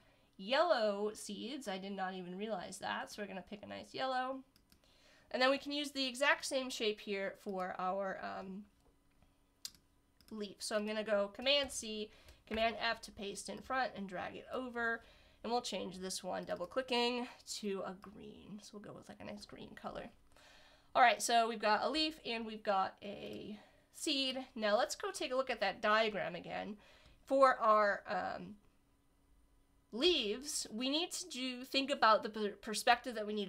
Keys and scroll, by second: 11.6 super+c, 12.5 super+f.